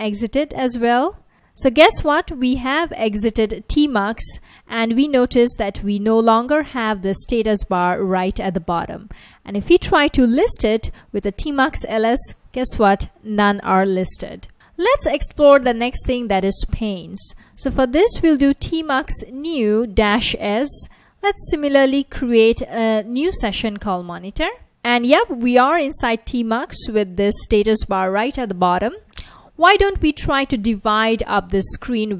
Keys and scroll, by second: 0.0-0.6 typing, 11.2 Return, 11.2 typing, 13.7 F1, 17.6-22.8 typing, 24.4 Return, 26.9 F1.